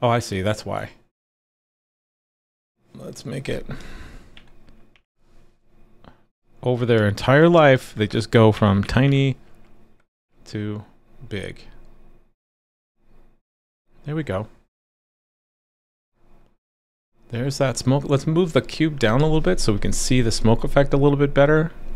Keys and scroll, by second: 10.1 super+s.